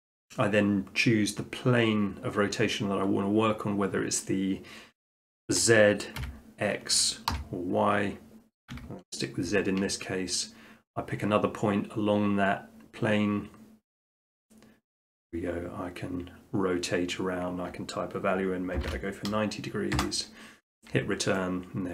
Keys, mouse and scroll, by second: 6.2 x, 7.3 y, 8.7 z, 14.2-15.4 drag, 18.8 typing, 20.0 Return, 21.3 middle drag.